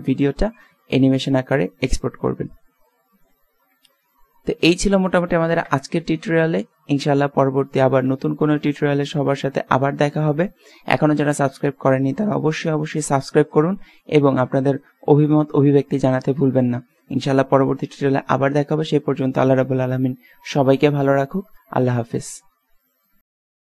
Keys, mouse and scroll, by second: 5.6 KP_0, 7.8 alt+a.